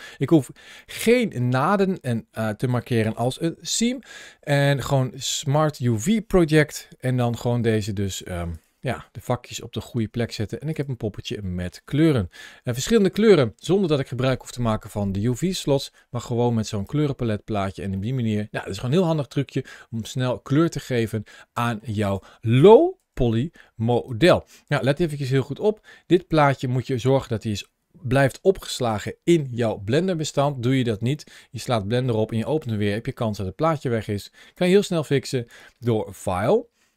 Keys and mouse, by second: 0.7 shift+middle click, 1.7-2.6 middle drag, 3.5-4.0 shift+middle drag, 4.3-5.0 middle drag, 6.5 u, 7.3 u, 8.6 Tab, 9.8 Tab, 10.2 middle click, 11.3 shift+middle drag, 12.7 ctrl+shift+a, 17.8-21.6 middle drag, 22.8 g, 23.9 right click, 34.4-36.9 drag.